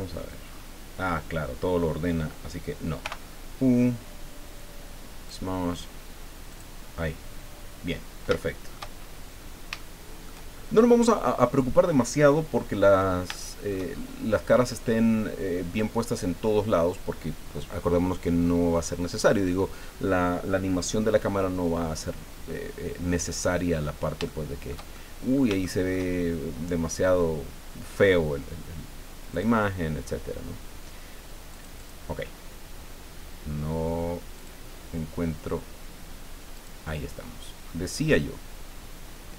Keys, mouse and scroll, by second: 0.4-0.7 scroll up 1, 3.0 u, 5.3 click, 6.5 click, 7.9 scroll down 1, 8.4 shift+middle click, 9.0-9.6 shift+scroll up 3, 9.8 shift+click, 12.2 click, 13.3 shift+click, 23.2 click, 24.3 shift+click, 25.3 shift+click, 25.6 shift+click, 29.3 click, 31.5 click, 34.4 click, 36.5 click, 37.2-39.3 scroll down 20.